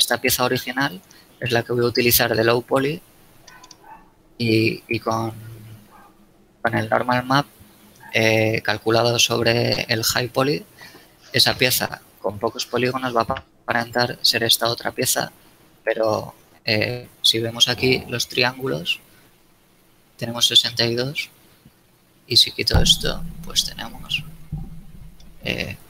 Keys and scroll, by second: 0.2 shift+z, 11.5 a.